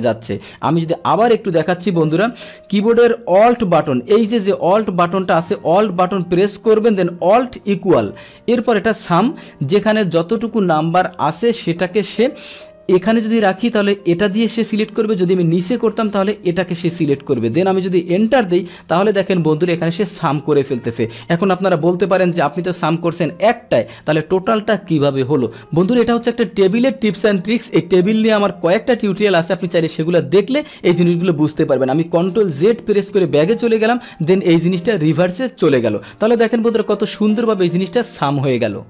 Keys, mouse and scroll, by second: 0.4 ctrl+z, 0.8 ctrl+z, 2.2 Delete, 18.2 Return, 32.6 ctrl+z, 33.0 ctrl+z, 34.1 click, 34.9 click.